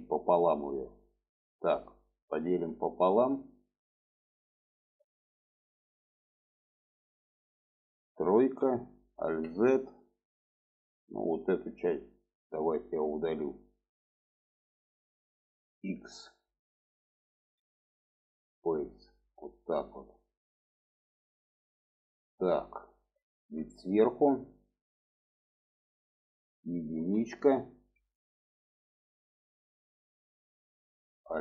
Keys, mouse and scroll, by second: 0.0 middle click, 2.2 click, 3.8 click, 4.5 middle click, 7.6 shift+middle click, 8.4 3, 9.2 alt+z, 9.8-14.8 drag, 17.5 x, 19.3-23.4 middle drag, 23.7 shift+middle click, 24.8 shift+middle click, 25.5 shift+middle drag, 29.0-30.8 middle drag, 31.3 alt+z.